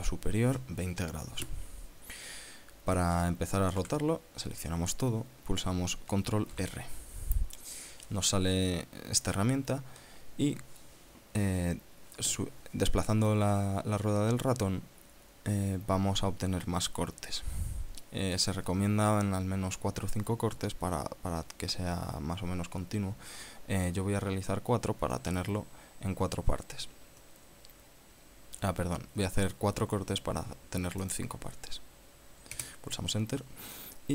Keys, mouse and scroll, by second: 4.5 a, 7.2 ctrl+r, 17.3-18.2 scroll up 6, 18.9-19.3 scroll down 2, 25.1 scroll up 2, 25.7 scroll up 2, 26.7 scroll up 2, 31.7 click, 33.3 KP_Enter.